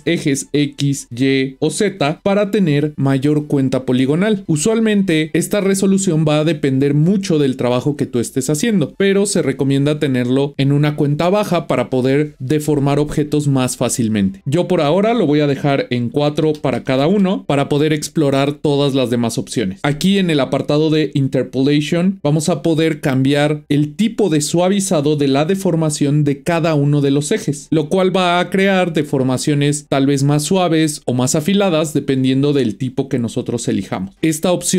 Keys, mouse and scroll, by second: 0.3-3.7 drag, 15.0-17.4 drag, 24.6-27.6 drag.